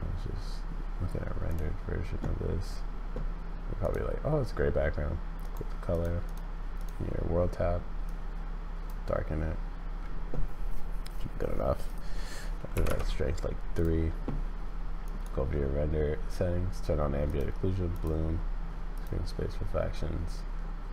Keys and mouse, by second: 5.4 click, 6.8 click, 11.8-13.5 drag, 17.3 click, 17.9 click, 18.9 click.